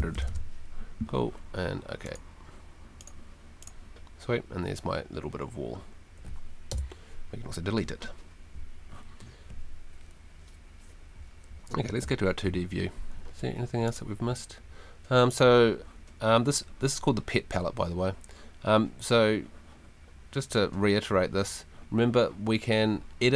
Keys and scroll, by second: 0.0-0.6 typing, 6.7 BackSpace, 12.0 F2, 13.2 Escape.